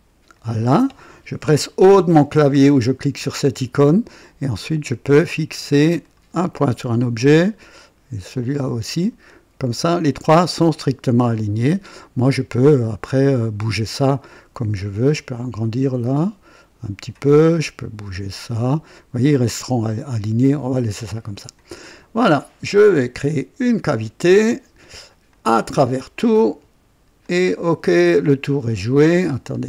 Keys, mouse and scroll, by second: 0.3 click, 1.9 o, 5.2 click, 6.0 click, 6.8 click, 8.8 click, 10.0 click, 11.2 right click, 15.0-17.3 drag, 18.3-20.6 drag, 21.3 click, 23.9 click, 25.2 click, 25.8 click, 27.2 click, 27.9-28.7 drag, 29.2-29.6 scroll up 1.